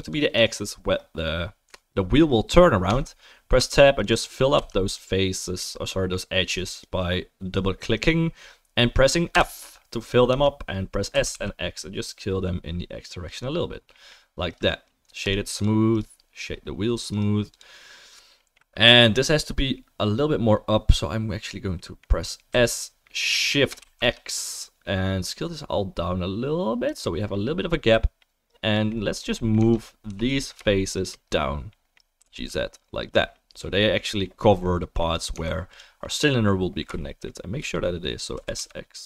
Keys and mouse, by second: 0.0 middle click, 0.0 right click, 0.4 middle click, 0.4 right click, 2.9 Tab, 3.6 2, 4.1 middle click, 4.1 right click, 4.5 f, 5.4-6.7 middle drag, 5.9 click, 6.7 click, 6.8-9.3 middle drag, 9.3 click, 9.3 f, 9.3-30.9 right drag, 10.3 Tab, 11.1 s, 15.5 click, 15.5 middle click, 22.5 s, 29.6 Tab, 30.1 3, 30.9 shift+middle click, 31.0-39.0 shift+right drag, 32.2 g, 35.3 Tab, 35.7 click, 35.7 middle click, 38.3 s.